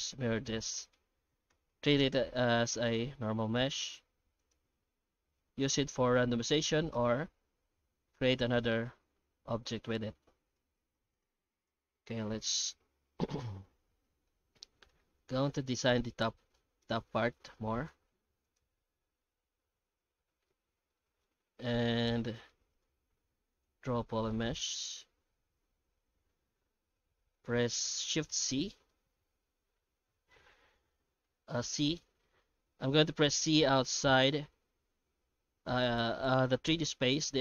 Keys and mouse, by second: 2.2 Tab, 2.9 middle click, 3.7 a, 4.3 e, 4.7 alt+s, 8.8 Tab, 9.5 middle click, 10.9 x, 11.5 right click, 11.9 Tab, 12.6-13.6 middle drag, 13.8 Tab, 14.3-14.9 alt+middle drag, 15.1-15.4 shift+middle drag, 15.8-16.2 right drag, 16.2 middle drag, 16.7 Tab, 17.4 alt+middle click, 18.1 Tab, 18.4 right click, 20.5-21.0 middle drag, 21.2-21.7 alt+middle drag, 22.2 shift+middle click, 22.8 ctrl+shift+x, 24.3-37.4 shift+middle drag.